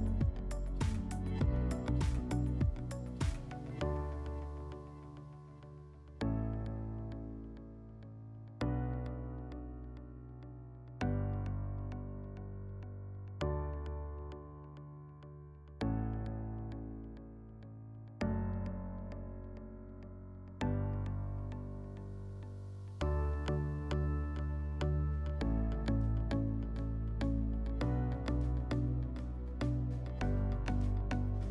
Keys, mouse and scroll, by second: 18.1-19.7 scroll up 2, 19.7 scroll up 1, 20.3-23.8 middle drag, 28.9-30.8 drag.